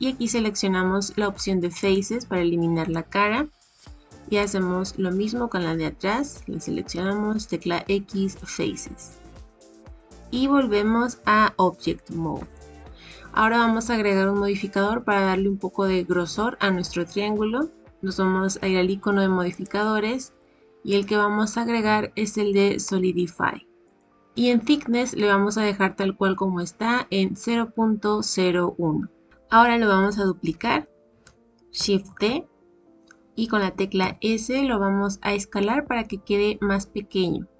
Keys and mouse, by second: 2.9 middle click, 6.9 x, 9.1-10.2 middle drag, 12.3 Tab, 20.9-24.0 drag, 32.0 shift+d.